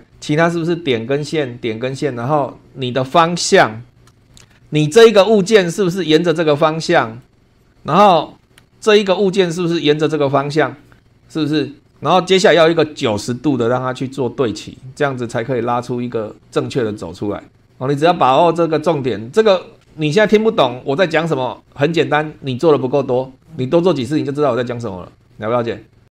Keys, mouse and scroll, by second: 3.0 scroll down 1, 3.9 shift+scroll down 1, 4.2 shift+middle click, 4.4 shift+scroll down 1, 5.3-5.6 scroll down 2, 6.9 shift+click, 7.4 scroll up 2, 7.6 click, 8.6 space.